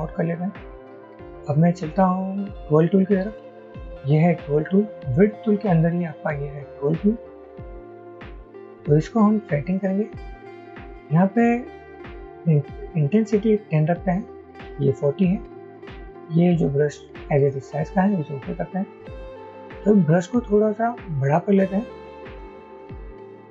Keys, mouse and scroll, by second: 9.8 double click, 23.3 alt+shift+click.